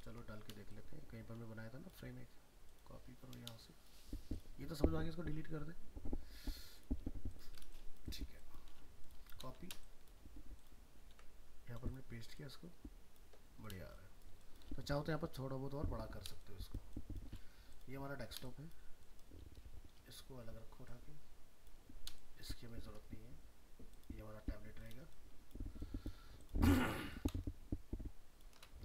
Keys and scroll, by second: 9.5 ctrl+c, 11.1 ctrl+v.